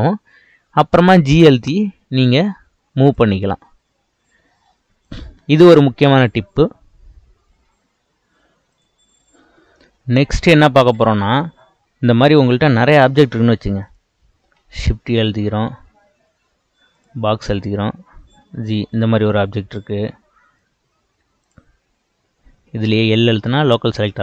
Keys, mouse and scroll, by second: 1.2 g, 5.1 click, 11.0-12.5 scroll down 3, 12.5-13.8 scroll down 3, 13.8 click, 14.6 shift+a, 18.3 g, 21.4 click, 23.6 l.